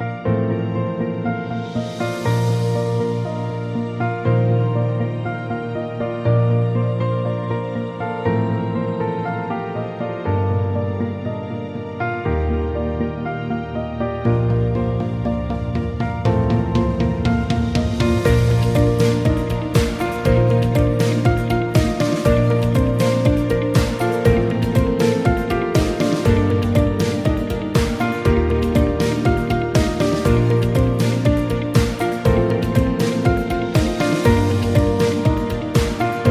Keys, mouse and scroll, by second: 0.3 ctrl+z, 4.6 right click, 5.7 click, 11.9-13.3 drag, 16.5-19.5 right drag, 20.7-21.8 drag, 23.4-25.8 drag, 26.5-27.7 drag, 30.1-32.4 right drag, 32.9-34.3 right drag.